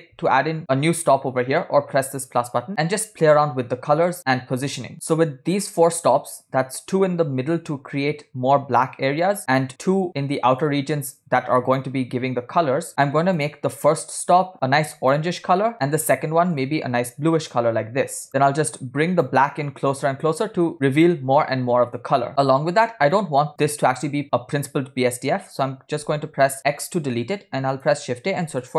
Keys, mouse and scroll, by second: 0.1 ctrl+click, 7.7-8.9 drag, 9.3-9.7 drag, 10.1 click, 11.9 click, 13.4 click, 14.2 click, 16.0 click, 16.6 click, 18.3 click, 19.9 click, 22.3-22.9 scroll down 7, 23.4 middle click, 23.6 scroll up 2, 23.6 click, 24.0 click, 26.7 x, 27.4 shift+a.